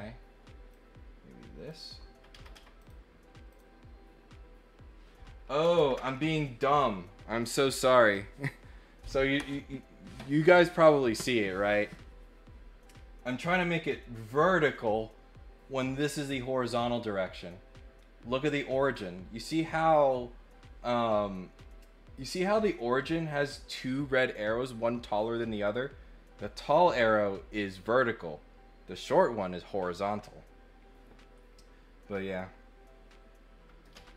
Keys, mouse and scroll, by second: 0.7 click, 2.8 click, 3.5 click.